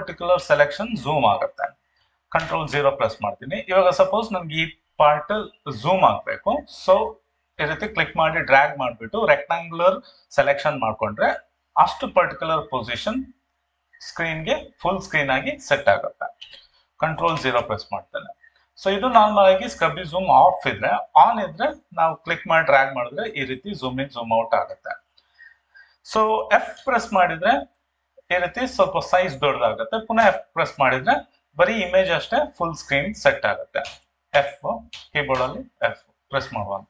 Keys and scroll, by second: 30.3 f, 30.8 f, 33.9 f, 35.3 f.